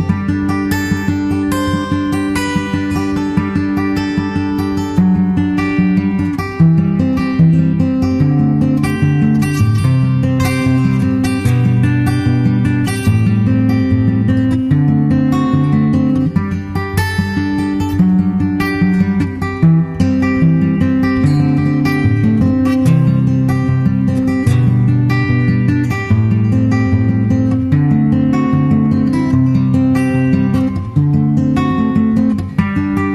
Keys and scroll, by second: 0.1 super+s, 8.6 super+z, 9.5 super+s, 11.2 super+/, 14.8 super+Tab, 15.3 super+Tab, 15.4 super+Tab, 15.7 super+t, 25.0 super+c, 25.2 super+Tab, 25.6 super+Tab, 25.8 super+Tab, 25.9 super+Tab, 27.3 super+v, 28.8 super+s.